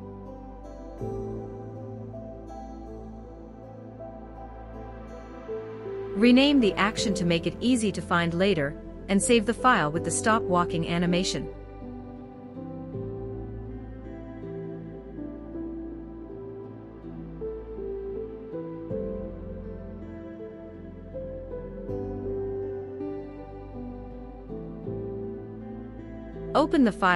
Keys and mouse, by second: 11.0-12.5 drag, 25.0-27.1 drag.